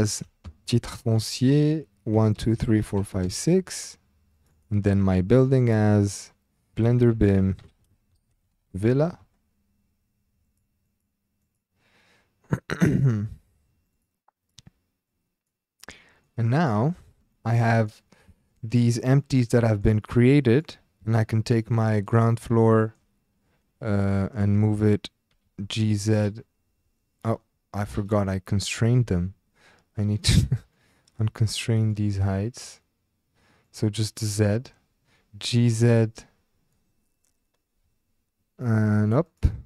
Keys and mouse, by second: 4.3-9.2 drag, 6.7 BackSpace, 8.7 l, 10.4 click, 11.4-12.5 drag, 13.9 click, 14.4 click, 15.1 click, 16.2-16.8 middle drag, 17.3 shift+drag, 17.7 drag, 18.4 shift+drag, 18.9 click, 19.2 click, 19.6 drag, 20.5 click, 21.2-21.5 shift+drag, 22.6 shift+click, 25.3 g, 25.4 z, 27.3 Escape, 29.0 n, 30.7 click, 33.6 click, 35.4 g, 35.5 z, 39.3 click.